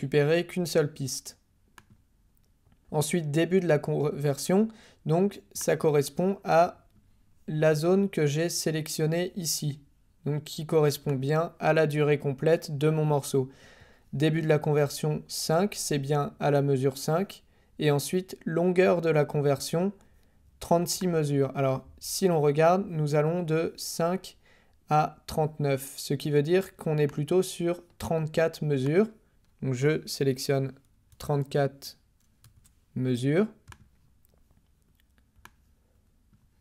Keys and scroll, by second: 31.0 shift+'.